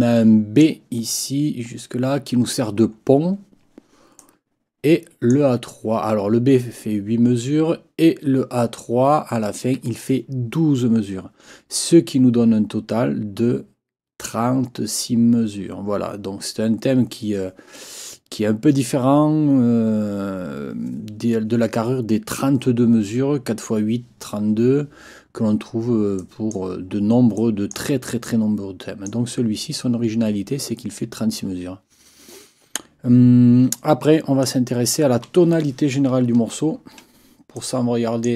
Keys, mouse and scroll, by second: 0.1 click, 0.3 click, 4.2-5.5 drag, 26.2 click, 27.4 click, 27.6 click, 28.2 click, 28.4 click, 28.6 click, 34.4 click, 36.4-37.0 ctrl+scroll up 2, 37.6 click.